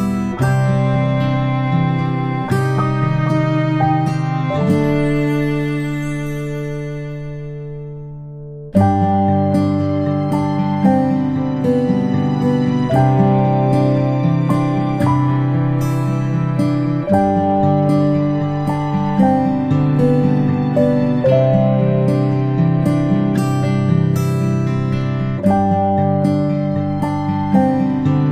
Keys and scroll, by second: 1.7 ctrl+[, 2.2 ctrl+shift+[, 2.5 ctrl+], 2.8 ctrl+], 21.5 ctrl+i, 22.8-25.7 typing, 28.0 ctrl+i.